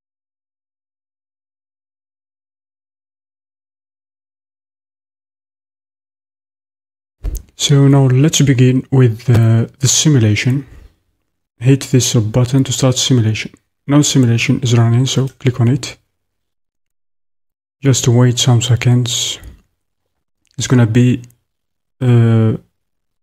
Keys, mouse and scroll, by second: 4.7 click, 15.3-23.2 drag.